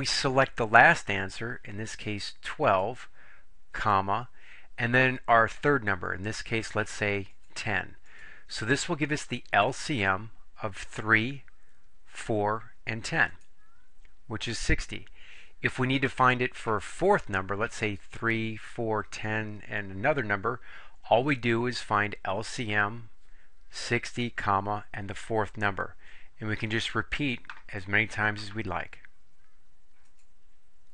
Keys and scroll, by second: 2.0 1, 2.8 2, 3.9 ,, 7.4 1, 8.2 0, 13.4 Return.